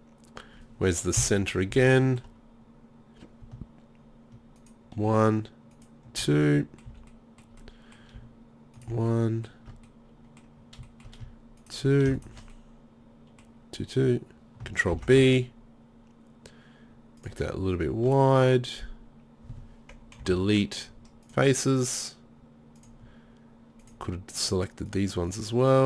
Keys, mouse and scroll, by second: 1.2 KP_7, 1.7 z, 6.6 middle click, 6.9 z, 7.7 middle click, 9.3 middle click, 10.0 middle click, 10.1 middle click, 10.9 middle click, 15.0 ctrl+b, 20.2 Delete.